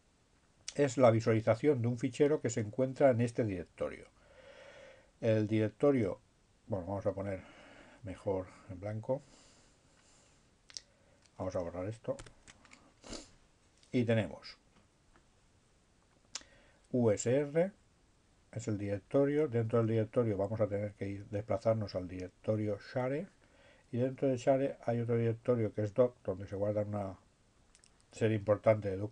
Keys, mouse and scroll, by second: 5.1-6.7 drag, 7.3 click, 8.9 click, 11.9 ctrl+z, 14.6-15.7 drag, 16.7-17.7 drag, 18.4 click, 19.2 click, 20.2 click, 21.6 click, 22.3 click, 22.8 click, 24.3 click, 25.4-26.7 drag, 27.3 click.